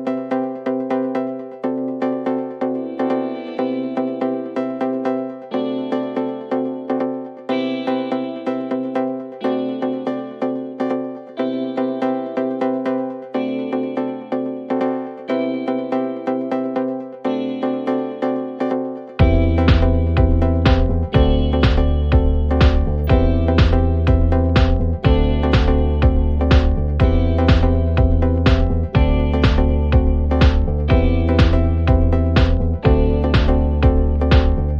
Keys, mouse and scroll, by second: 0.4 click, 1.4 click, 3.3 click, 6.1 click, 8.5 click, 14.1 click, 15.7 click, 16.7 click, 19.8 click, 22.1 click, 23.5 click, 24.2 t, 25.9 click, 27.5 click, 28.0 0, 28.7 Return, 30.0 click, 30.2-31.1 typing, 32.9 click, 33.1-34.0 typing, 34.2 Return.